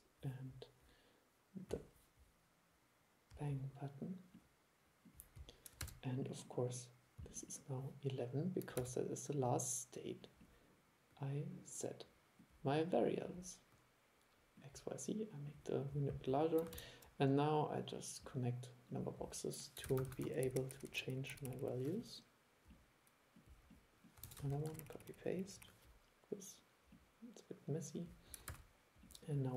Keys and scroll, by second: 5.9 super+e, 8.9 super+e, 16.9 super+3, 20.0 super+c, 20.2 super+v, 24.4 super+c, 24.6 super+v, 28.6 super+e.